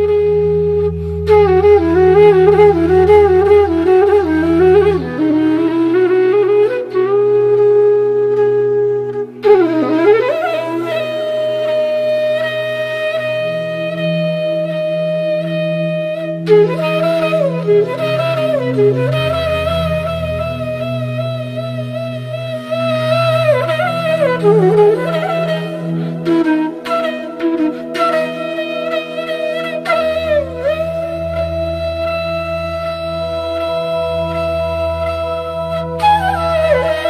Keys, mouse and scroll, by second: 3.5-5.8 drag, 6.9 alt+scroll down 1, 9.0 click, 9.1-15.7 drag, 16.3 right click, 16.9 click, 20.7-36.4 drag.